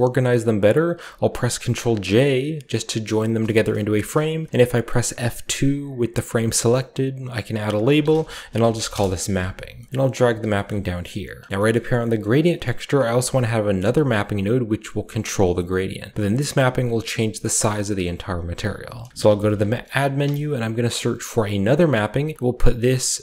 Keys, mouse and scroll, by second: 1.5 ctrl+j, 2.6 a, 3.0 click, 3.3 scroll down 1, 3.6-4.8 drag, 3.7 g, 5.0-7.8 scroll up 1, 5.8-7.8 drag, 6.2 F2, 6.4 typing, 7.7-11.5 typing, 9.5-10.2 shift+scroll down 1, 9.8 middle click, 10.2-11.5 drag, 10.6-11.3 middle drag, 10.6-12.6 scroll up 1, 14.1 click, 16.2 click, 16.8 scroll up 2, 18.5-19.5 typing, 18.8 click, 20.1 Return, 21.9 click, 22.3 click, 22.9 click, 23.0 typing.